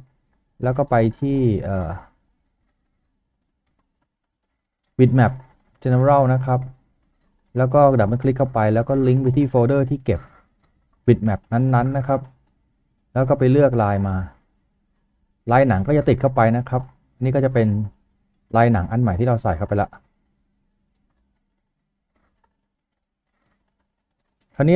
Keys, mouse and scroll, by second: 1.4-2.1 typing, 2.1 double click, 6.0 double click, 14.3 double click, 18.2-18.6 scroll down 1.